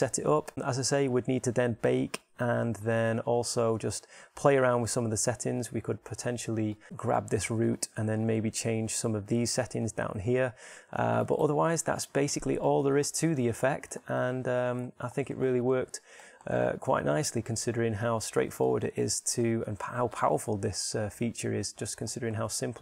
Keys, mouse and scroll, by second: 6.3 middle click, 7.2-12.1 right drag, 12.1 middle click.